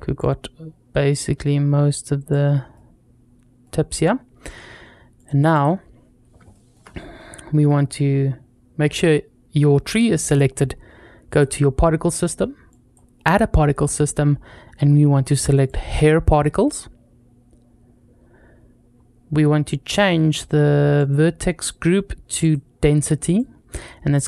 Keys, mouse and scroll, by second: 0.0 click, 2.3 scroll down 1, 2.6 middle click, 5.0-5.5 drag, 6.0 scroll down 2, 6.4 shift+middle drag, 6.8-7.4 scroll up 1, 11.1 click, 12.5 click, 15.2 click, 18.0-18.7 scroll down 2, 18.7-20.3 scroll down 2, 20.8 click, 21.4-21.7 scroll down 1, 22.2 click, 24.0 scroll up 1.